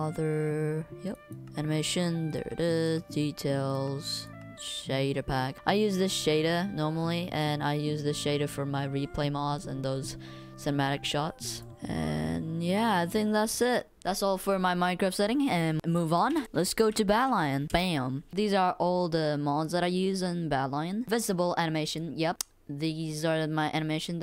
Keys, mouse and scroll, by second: 15.9 click, 16.0 right click, 16.4 w, 17.0 w, 17.4 d, 17.4 click.